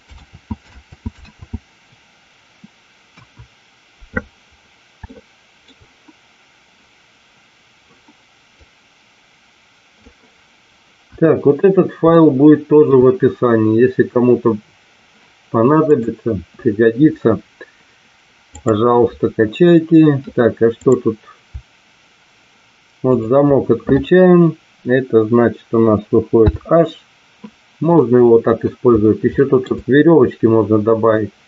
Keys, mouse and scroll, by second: 0.8 ctrl+z, 1.6 ctrl+z, 3.1 KP_1, 5.0-5.6 shift+middle drag, 8.7 click, 11.0 KP_1, 12.1-12.8 shift+middle drag, 18.5 click, 20.7 click, 23.1 shift+click, 26.3 h, 27.9-28.6 middle drag, 29.2 shift+middle click.